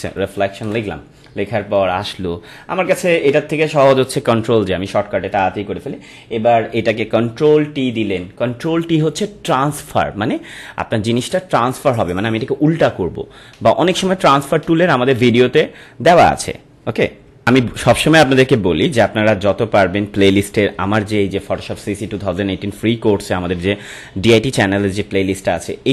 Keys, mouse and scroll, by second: 0.0-0.5 typing, 0.6 Return, 17.5 click.